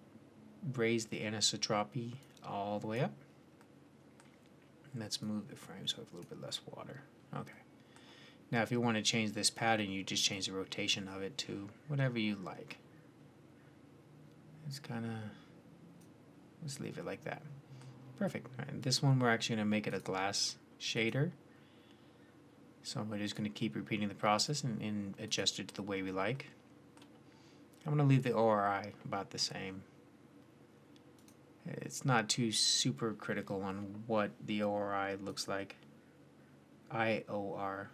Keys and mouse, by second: 3.5 drag, 3.7 middle click, 5.1 middle click, 18.6-22.8 drag, 22.8-24.3 middle drag, 24.3-26.2 drag, 26.2 middle drag, 26.4-29.8 drag, 29.8-31.0 middle drag, 31.0 click, 34.8 middle click, 35.1 click.